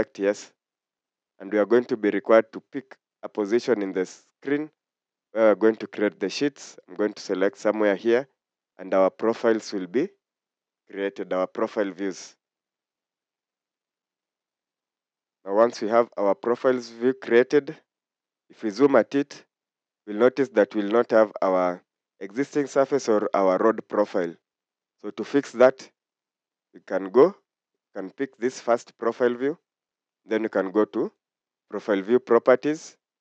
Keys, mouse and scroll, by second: 3.7 scroll down 1, 16.2-16.8 scroll up 1, 19.4 scroll down 1, 22.1 scroll up 1.